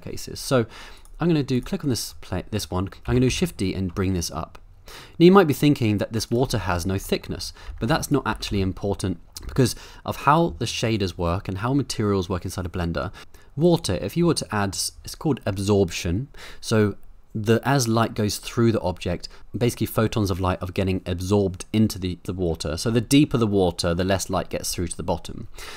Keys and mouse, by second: 1.5 click, 2.2 middle click, 3.1 shift+d, 3.3 z, 6.6 middle click, 7.2 middle click, 7.7 Tab, 7.9 2, 8.1 click, 8.3 g, 8.5 y, 9.2 middle click, 9.4 Tab, 13.2-13.7 middle drag.